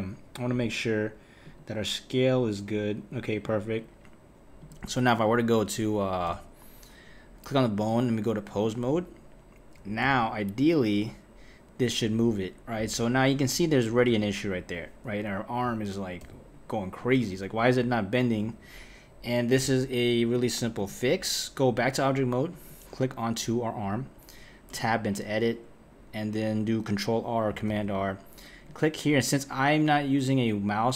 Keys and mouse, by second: 0.5 click, 1.4 click, 3.4 click, 4.6 click, 5.2 click, 6.3 n, 7.7-10.0 drag, 10.0 g, 13.3 click, 14.1 r, 16.2 g, 20.3-22.7 drag, 24.7 Tab, 27.7 r.